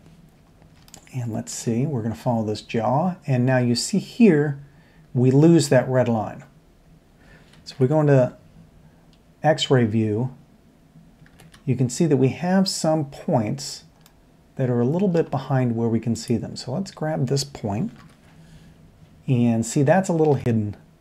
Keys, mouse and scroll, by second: 0.5 middle click, 0.9 shift+middle click, 7.7 alt+z, 11.3 alt+z, 14.3-15.1 middle drag, 18.0 ctrl+KP_7, 20.3 alt+z.